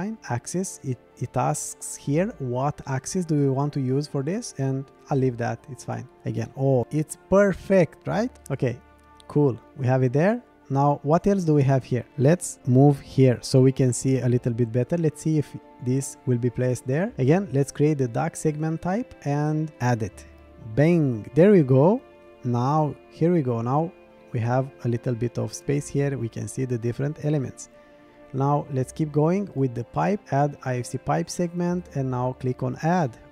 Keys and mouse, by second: 1.0-4.2 drag, 6.5-8.0 middle drag, 8.4 click, 13.5-14.2 middle drag, 16.1 click, 19.9 click, 20.9-26.1 middle drag, 26.8 shift+middle click, 27.4-27.9 middle drag, 31.9 click, 33.1-33.3 middle drag.